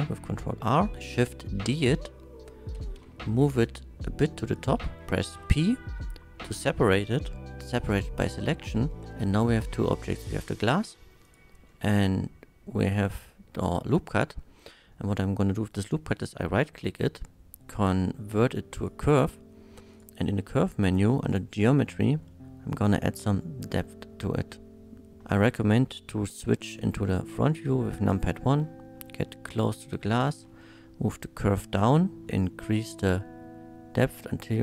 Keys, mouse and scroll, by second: 1.2 shift+d, 1.7 right click, 2.7 g, 3.0 z, 4.5 click, 5.3 p, 7.6 click, 8.9 Tab, 9.2-9.5 right drag, 9.5-9.9 middle drag, 10.6 shift+middle drag, 11.2 shift+click, 11.7-12.7 shift+middle drag, 13.9 middle click, 14.9 middle click, 15.7 right click, 18.8 click, 19.9 click, 21.2 click, 22.4-25.2 shift+drag, 25.2 KP_1, 26.4 shift+middle drag, 27.5 shift+middle drag, 28.2 middle click, 29.0 shift+middle drag, 30.2 g, 30.4 z, 32.7-34.6 shift+drag.